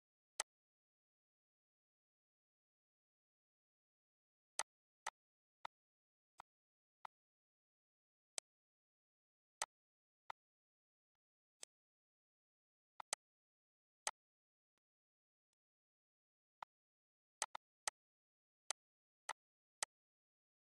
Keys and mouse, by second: 7.6 click, 10.6 click, 11.6 click, 13.1 click, 14.6 click, 15.1 click, 16.1 click, 17.8 click, 19.6 click, 20.0 click, 20.5 click.